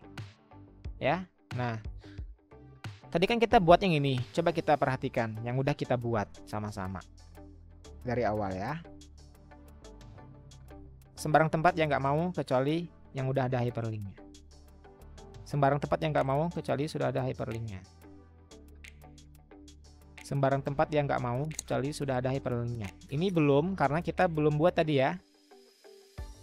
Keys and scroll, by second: 2.4 Escape, 4.0 Escape, 6.8 Escape.